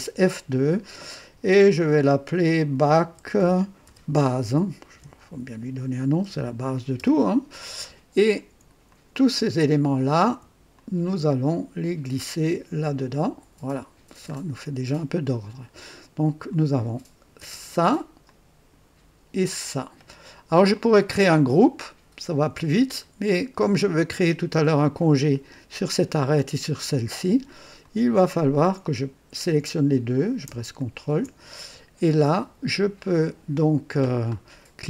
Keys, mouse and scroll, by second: 2.5-6.9 typing, 7.1 Return, 8.8 click, 10.7 shift+click, 11.5-13.0 shift+drag, 14.0 typing, 15.6 typing, 16.4 click, 17.4 space, 18.2-18.9 drag, 20.7-21.4 drag, 23.0 scroll down 2, 23.6-24.2 right drag, 24.5 click, 27.8 click, 30.7 ctrl+click.